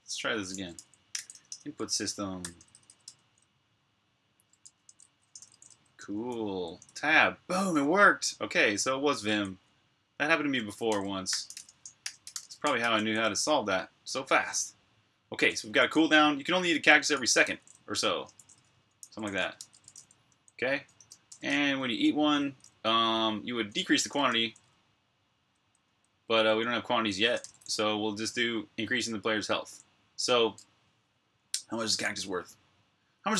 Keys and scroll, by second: 0.0-2.0 typing, 2.2 Tab, 2.4 Tab, 2.6 Tab, 2.8 Return, 4.5 Escape, 4.7-6.7 typing, 6.7 Tab, 8.5 shift+9, 10.4-12.9 typing, 15.0 typing, 16.8-21.3 typing, 23.8-27.2 typing.